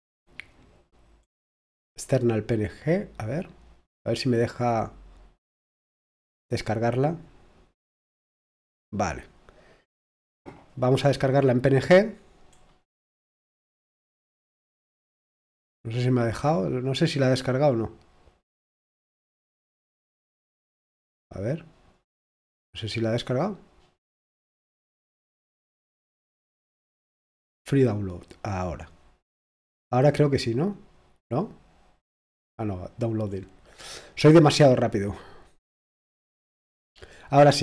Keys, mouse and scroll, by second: 1.2-1.9 scroll up 1, 1.9-7.1 drag, 9.0-9.5 scroll down 1, 11.1 click, 12.5-13.1 scroll up 1, 13.1-15.7 drag, 17.1 click, 18.6 click, 19.1-19.5 scroll up 1, 19.5-20.0 scroll down 1, 20.4-21.5 scroll up 2, 21.5 click, 25.2-26.2 drag, 26.2-26.7 scroll down 1, 30.2-33.2 drag, 33.2-33.7 scroll down 2, 33.9-34.3 scroll up 1.